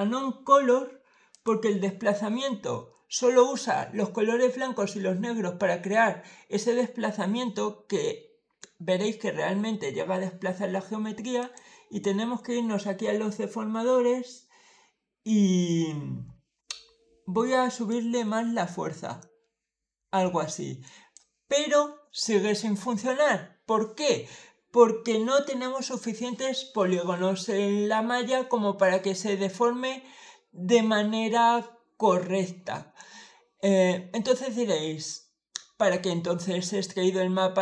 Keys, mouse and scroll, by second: 1.2 click, 11.3 click, 17.7-21.0 drag.